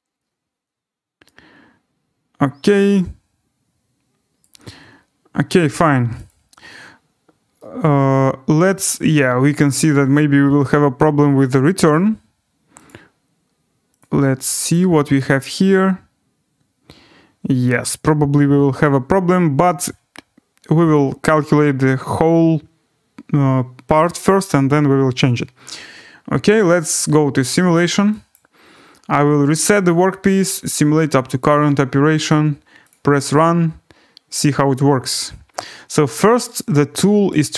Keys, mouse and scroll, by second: 4.4 right click, 6.3 click, 7.1-7.5 scroll, 8.9 right click, 11.9 right click, 12.9 click, 14.1 click, 15.2 click, 18.8 right click, 20.9 click, 22.6 scroll, 26.7 click, 28.3 click, 29.9-30.3 click, 31.5 click, 32.9 click, 33.3-34.4 scroll, 37.3 right click.